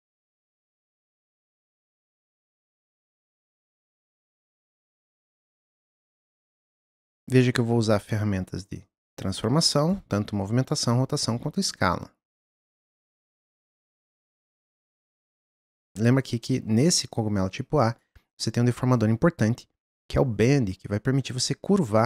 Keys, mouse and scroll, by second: 2.0 click, 4.3-5.2 drag, 5.9 click, 7.4 click, 9.4 click, 11.8 click, 14.3 click, 17.9-22.0 drag.